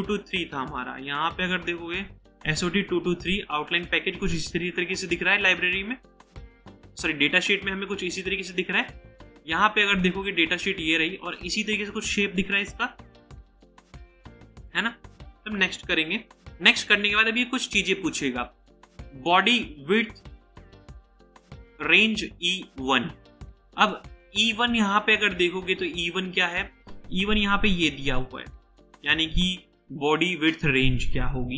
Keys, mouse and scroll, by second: 0.9-2.0 scroll down 1.